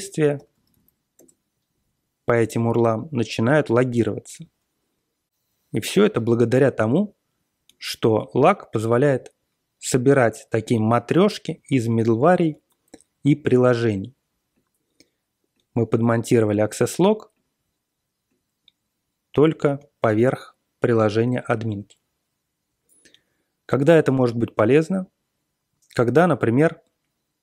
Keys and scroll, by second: 0.0-1.2 typing.